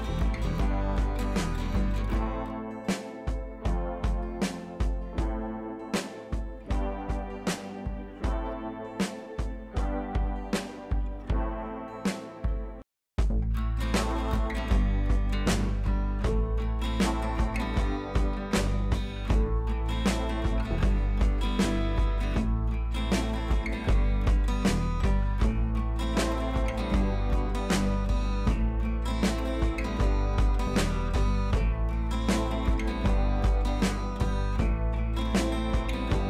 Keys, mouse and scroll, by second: 0.3-2.7 shift+drag, 2.7-3.6 scroll down 2, 3.9-4.3 click, 8.3-10.1 drag, 10.3 scroll down 1, 11.2 click, 12.1 ctrl+z, 13.2 ctrl+shift+z, 14.5 ctrl+t, 15.1-16.1 alt+click, 17.7 u, 17.9-18.4 scroll up 1, 18.4-19.6 drag, 21.3 ctrl+[, 22.3 click, 22.5-22.9 scroll up 1, 22.9 click, 23.3 ctrl+t, 23.9-24.7 alt+click, 31.7-32.3 ctrl+scroll up 2, 32.3-32.8 shift+drag, 34.1-35.5 shift+drag.